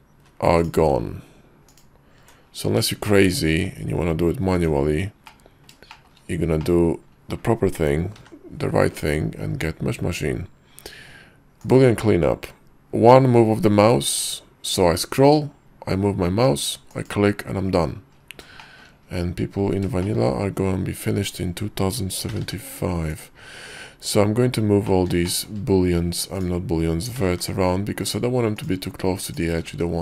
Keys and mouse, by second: 0.2 ctrl+z, 1.8 ctrl+click, 3.4 shift+click, 4.6 Tab, 5.4 click, 6.0 shift+click, 8.3 y, 18.9 shift+middle click, 20.2 shift+click, 21.4 click, 22.4 g, 25.0 click, 25.2 shift+middle click, 25.5 shift+click, 25.7 shift+middle click, 26.4 click, 27.3 g, 28.7 click, 29.4 click, 29.7 g.